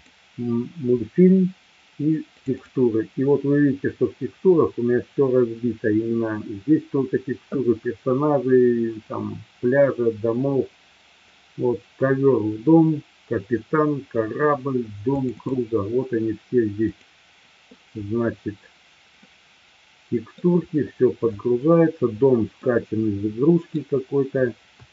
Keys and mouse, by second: 19.2-20.3 middle drag, 22.6-23.7 middle drag.